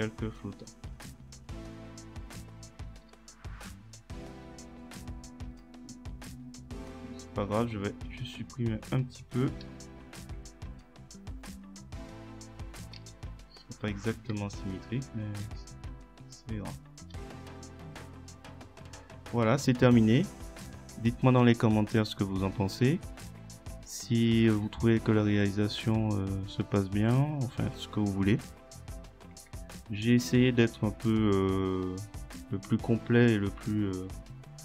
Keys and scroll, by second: 9.7 Delete, 13.0 Delete.